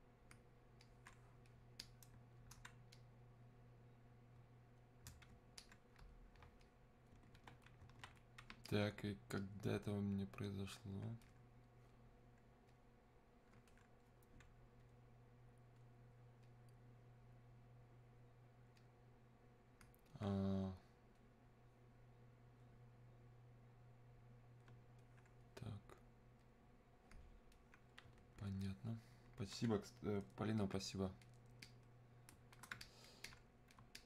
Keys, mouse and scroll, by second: 0.9-5.6 alt+drag, 5.6-14.9 alt+drag, 18.8-34.0 drag.